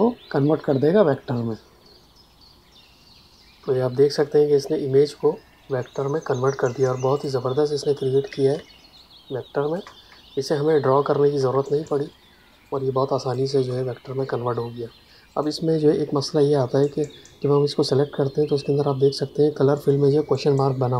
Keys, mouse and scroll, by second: 7.1 click, 8.5 ctrl+space, 8.9 click, 9.0 ctrl+space, 12.4 ctrl+alt+click, 13.7 click.